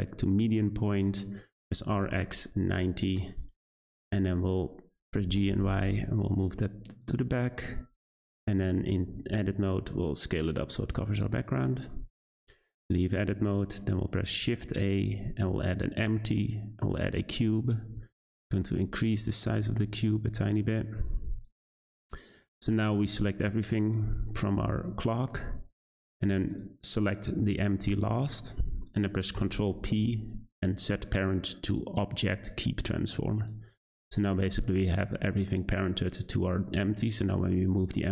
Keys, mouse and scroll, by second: 1.7 r, 4.1 middle drag, 4.4-5.1 scroll down 3, 5.1 g, 7.3 `, 8.1-8.7 scroll down 1, 8.7 Tab, 9.1 a, 9.2 s, 11.7 scroll up 2, 12.0 Tab, 14.2 shift+a, 17.9 s, 19.6 g, 22.3-22.7 scroll down 2, 22.7 a, 23.0-23.4 middle drag, 23.4-24.0 scroll down 7, 24.3-25.1 drag, 25.7-26.5 scroll up 3, 26.5 shift+click, 27.0 shift+click, 27.9-29.3 scroll up 1, 29.3 ctrl+p, 32.8 click, 33.3 click, 34.4 g.